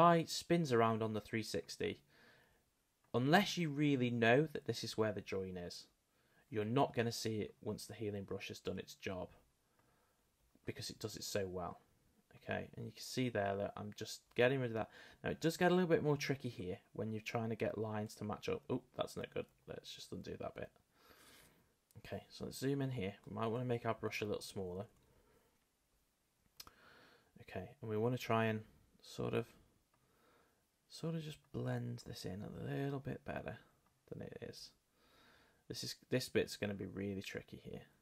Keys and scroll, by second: 23.6 [.